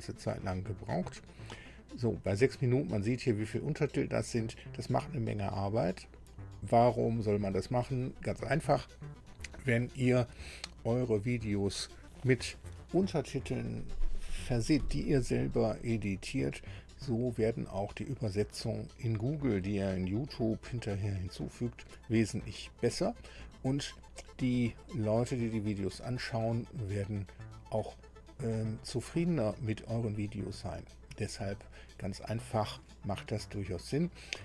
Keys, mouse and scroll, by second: 0.0-1.2 ctrl+scroll down 6, 1.5 ctrl+scroll down 2.